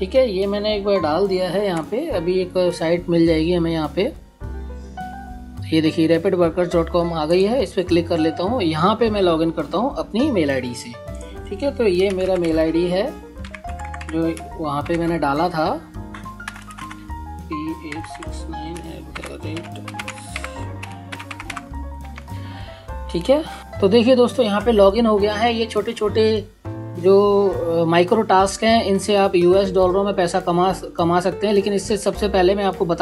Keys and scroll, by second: 1.0 Return, 11.1-13.6 typing, 14.7 BackSpace, 16.2-20.2 typing, 20.3 Tab, 22.3-23.5 typing.